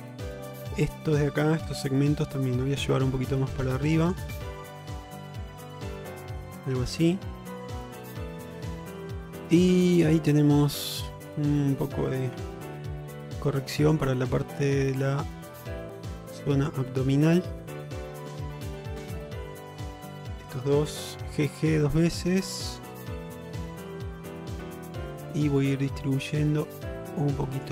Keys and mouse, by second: 0.8 click, 1.7 2, 2.9 g, 4.8 g, 6.3 middle click, 8.0 click, 8.3 middle click, 9.4 shift+middle click, 10.1 middle click, 12.4 1, 13.5 click, 14.8 middle click, 16.2 click, 18.1 shift+middle click, 18.7 click, 21.3 g, 23.1 g, 24.0 click, 24.4 g, 25.7 g, 26.8 click, 27.1 g.